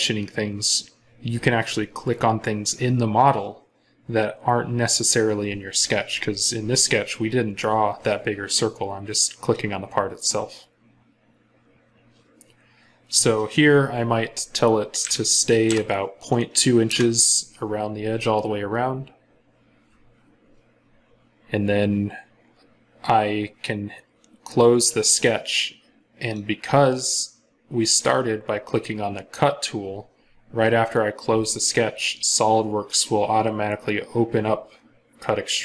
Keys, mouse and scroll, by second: 14.8-15.5 typing, 16.7 Return.